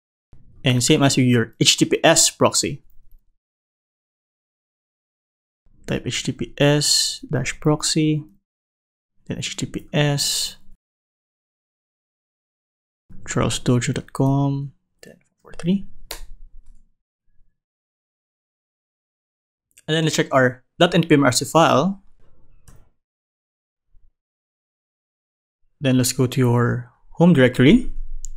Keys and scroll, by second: 22.6 super+n.